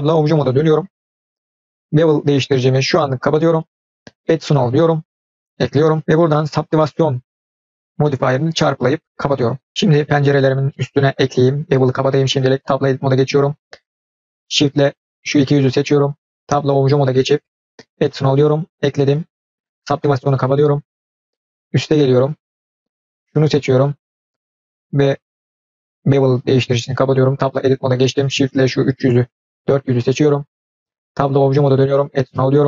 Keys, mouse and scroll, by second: 2.6 click, 4.3-4.7 drag, 8.4-9.7 drag, 9.7-10.1 scroll up 3, 10.3 click, 10.6 middle click, 11.6 click, 12.5 Tab, 14.0 click, 14.9 shift+click, 16.7 Tab, 17.8 click, 19.9 click, 20.7-21.8 scroll down 2, 21.2-21.8 middle drag, 22.2-22.8 scroll up 2, 22.9 click, 23.4 scroll down 1, 25.9 click, 27.3 Tab, 28.3 shift+click, 28.7 shift+drag, 29.2 shift+click, 29.7 shift+click, 31.3 Tab, 32.1 click.